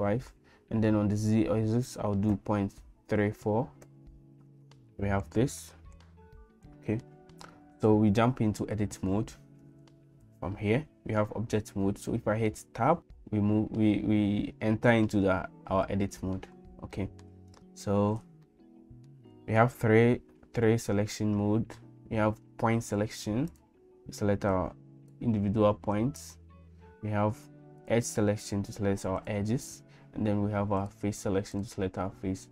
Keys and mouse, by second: 1.2-4.6 right drag, 6.4 middle click, 13.0 Tab, 17.0 middle click, 18.5 middle click, 23.5 click, 24.5 click, 25.9 click, 27.8 click, 29.2 click, 30.8 right click.